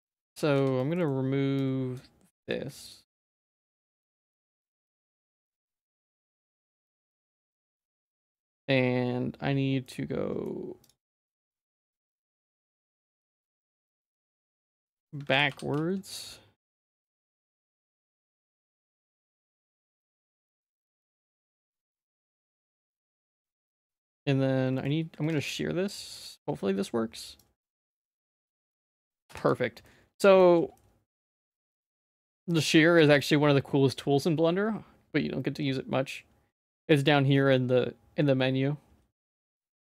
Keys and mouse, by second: 0.3 3, 0.5 z, 0.8 middle click, 1.0 middle click, 1.5 click, 2.3 x, 3.1 z, 3.4 shift+middle click, 3.7 shift+middle click, 4.2 middle click, 4.5 2, 5.9 middle click, 6.3 shift+middle click, 6.8 Tab, 7.0 Tab, 7.2 middle click, 7.5 middle click, 8.2 ctrl+s, 9.9 middle click, 11.2 middle click, 11.5 g, 12.4 g, 14.8 middle click, 15.3 ctrl+s, 15.4 e, 17.5 middle click, 17.9 shift+middle click, 18.3 middle click, 18.7 shift+middle click, 19.0 middle click, 19.6 middle click, 19.9 shift+middle click, 20.4 g, 21.2 middle click, 22.2 g, 23.5 middle click, 23.8 shift+middle click, 24.7 middle click, 25.3 ctrl+s, 25.9 click, 26.2 middle click, 27.4-29.3 drag, 29.9 middle click, 30.7 middle click, 31.6 middle click, 32.5 shift+middle click.